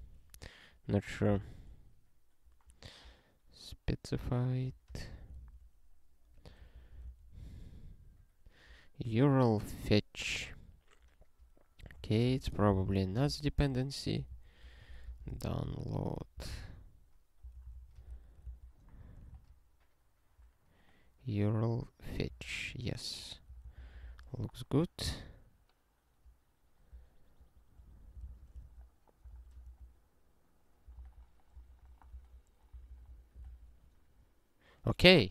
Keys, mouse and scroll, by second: 0.0 ctrl+s, 1.1 click, 1.5 ctrl+e, 3.1 scroll down 1, 4.5 click, 4.9 ctrl+p, 5.1 ctrl+p, 5.5 ctrl+e, 6.3 click, 6.7 ctrl+n, 7.1 ctrl+e, 8.8 scroll up 1, 10.6 scroll up 1, 11.8 click, 12.0 ctrl+a, 12.2 ctrl+k, 12.3 ctrl+/, 12.6 ctrl+n, 12.7 Return, 12.9 ctrl+y, 13.2 alt+b, 13.6 alt+d, 13.9-15.5 typing, 15.7 alt+x, 17.1 Return, 19.3 ctrl+v, 22.3 super+w, 23.4 ctrl+n, 23.6 ctrl+n, 23.7 ctrl+n, 24.0 ctrl+e, 24.7 scroll down 1, 26.3 scroll down 1, 27.4 click, 27.8 ctrl+p, 28.3 ctrl+e, 28.6 ctrl+alt+f, 29.4 ctrl+e, 29.7 ctrl+alt+f, 31.1 ctrl+e, 31.7 ctrl+alt+f, 32.3 ctrl+e, 32.7 ctrl+n, 32.9 ctrl+n, 33.1 ctrl+n, 33.5 ctrl+e.